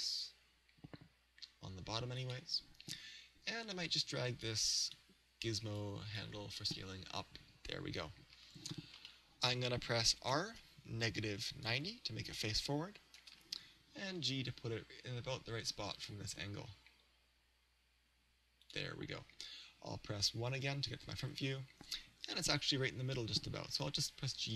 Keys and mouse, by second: 2.3 click, 4.5-7.5 drag, 9.1-11.1 middle drag, 10.3 r, 14.1 g, 18.7 click, 20.7 KP_1, 23.7 g.